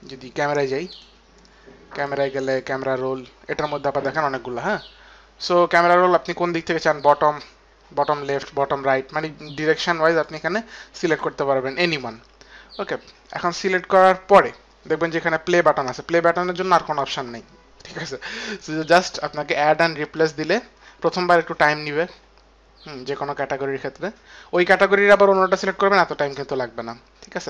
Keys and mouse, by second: 1.1 click, 2.7 click, 5.4 click, 9.3 click, 10.3 click, 13.5 click, 13.6 click, 14.5 click, 20.3 click.